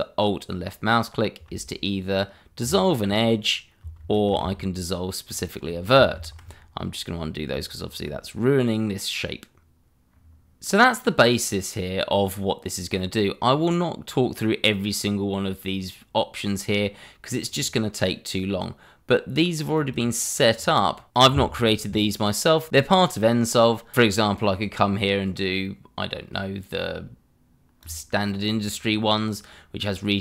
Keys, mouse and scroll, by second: 2.6 click, 4.0 ctrl+z, 5.2 alt+click, 6.1 ctrl+z, 7.7 shift+middle click, 7.8 middle click, 7.9 shift+middle click, 8.3 middle click, 10.1 scroll down 1, 10.6 middle click, 17.4 click, 19.7 click, 24.5 click, 27.8 click.